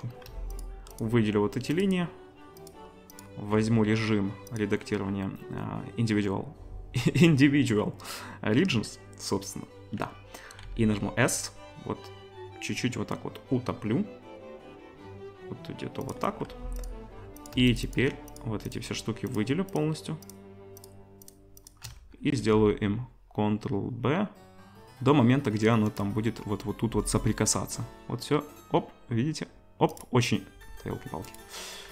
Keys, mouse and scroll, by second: 0.6-1.7 alt+shift+middle drag, 1.7 alt+shift+click, 1.8 alt+shift+middle click, 2.6 alt+shift+click, 2.7 alt+shift+middle click, 3.1 alt+shift+click, 3.2-4.6 alt+shift+middle drag, 4.6-16.1 drag, 10.6 s, 13.7-17.5 middle drag, 16.5 2, 16.8 click, 17.4 click, 17.9 click, 18.3 click, 19.3 click, 19.7 alt+shift+click, 20.2 alt+shift+click, 22.3 ctrl+b, 22.3-29.9 middle drag, 26.8 ctrl+b, 29.9 click, 30.0-31.9 middle drag, 30.9 ctrl+b.